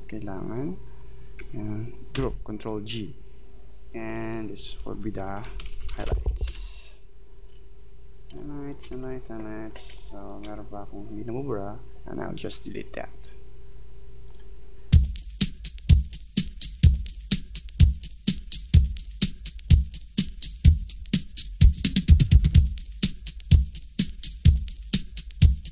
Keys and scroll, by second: 2.2 ctrl+g, 6.5 Return, 8.3 space.